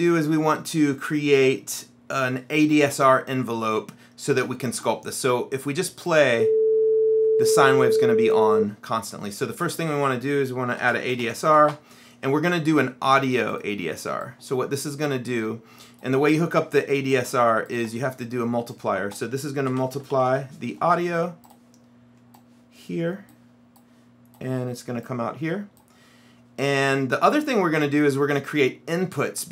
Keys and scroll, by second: 10.7-12.2 typing, 19.6-20.9 typing.